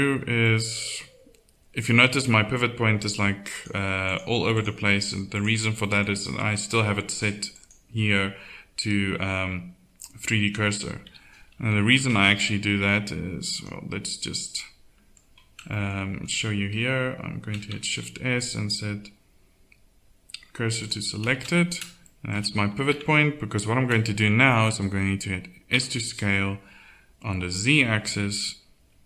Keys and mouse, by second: 0.1 z, 5.8-7.9 middle drag, 11.0 z, 11.7 KP_1, 12.0 Tab, 17.9 shift+s, 22.9 Tab, 25.7 s.